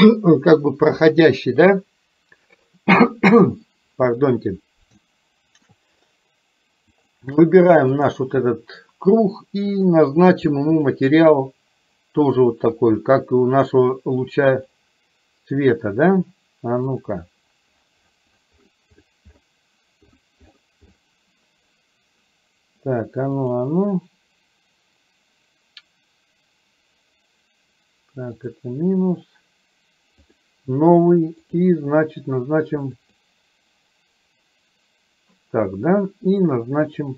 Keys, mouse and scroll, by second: 5.1-5.9 shift+middle drag, 7.2 click, 8.1 click, 13.1-15.1 drag, 17.0-23.6 drag, 28.5 click, 30.2 click, 31.5 click, 37.0-37.1 drag.